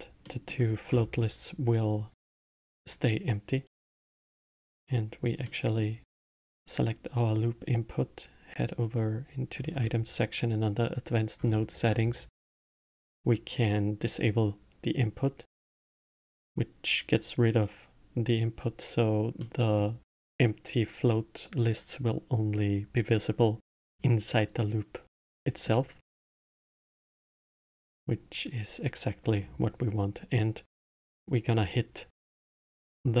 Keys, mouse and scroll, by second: 0.3-1.0 middle drag, 1.0-2.3 scroll up 7, 2.3-3.7 middle drag, 3.7 click, 5.5-8.5 middle drag, 8.7 click, 9.6 scroll down 2, 10.9-11.4 drag, 11.4-12.7 scroll down 10, 12.7-14.0 scroll down 1, 14.0 click, 15.7 click, 19.4-21.8 middle drag, 21.8 click, 24.5 click, 25.3-30.6 middle drag, 31.6-33.2 drag.